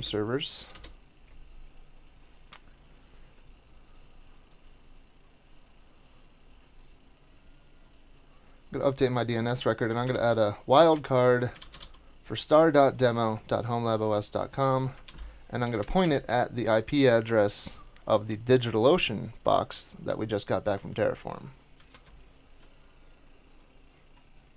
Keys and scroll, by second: 0.0-0.5 typing, 0.7 Return, 10.0 typing, 11.3-12.3 typing, 15.0 alt+c, 15.6 Down, 15.8 Down, 16.0 Return, 21.9 super+Tab.